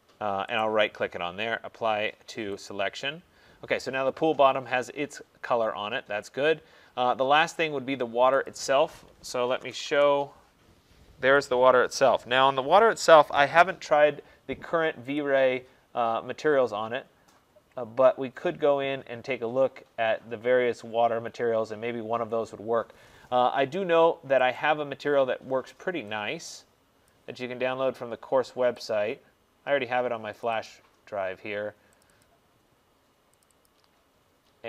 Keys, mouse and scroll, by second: 0.7 right click, 2.7 click, 8.5 click, 9.5 typing, 9.9 Return, 11.5 click, 11.5 typing, 15.2 click, 17.1-17.8 scroll down 1, 17.8-18.9 scroll up 5, 18.9-20.3 scroll down 3, 22.1 middle click, 24.6 click, 27.2 click, 29.0 click, 30.5 click, 30.7 click, 32.1 click, 32.3 click, 33.5 click, 33.7 click.